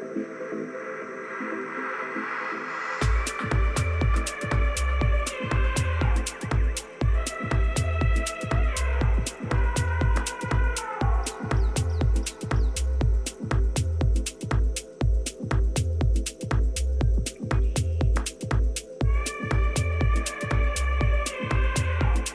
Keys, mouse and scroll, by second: 0.3-2.6 middle drag, 0.7 click, 5.7 ctrl+KP_1, 9.0 a, 9.9 KP_1, 11.6 KP_3, 12.7-15.2 middle drag, 14.1 a, 14.5 a, 16.6 b, 19.9-21.8 drag, 21.1 a, 21.5 b.